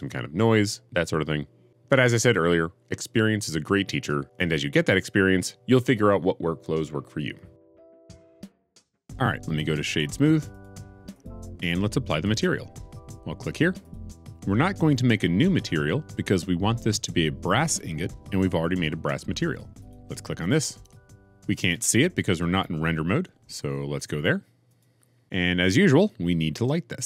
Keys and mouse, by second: 0.0-1.2 typing, 1.3 click, 1.5 click, 1.9 click, 2.2 click, 2.7 g, 2.8 z, 3.9-7.1 typing, 4.2 click, 4.6 click, 10.5 right click, 19.7-21.0 drag.